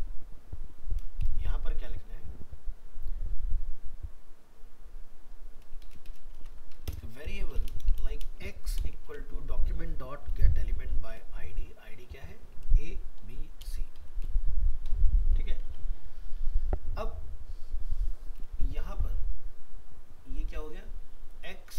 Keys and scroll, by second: 6.4 ctrl+c, 9.0 ctrl+v.